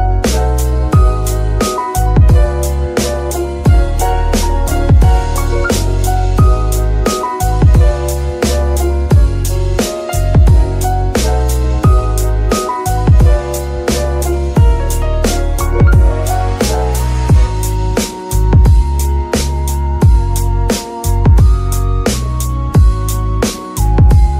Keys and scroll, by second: 0.1 g, 1.0 Escape, 1.7 g, 2.6 Escape, 5.2 r, 5.8 Escape, 8.2 r, 8.5 Escape, 9.7 r, 10.7 Escape, 15.6 r, 18.3 Escape, 18.8 KP_3, 20.4 shift+r, 20.9 Escape, 21.8 shift+r.